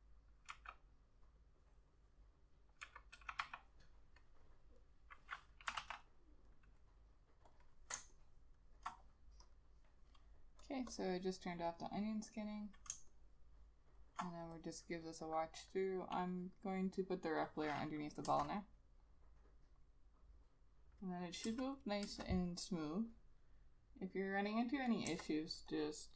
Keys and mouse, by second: 0.6 ], 3.0 [, 3.3 ], 3.5 ], 5.9 ctrl+z, 8.1 space, 11.0 double click, 13.1 space, 18.4 Return, 21.6 Return, 22.1 Return, 25.2 Return.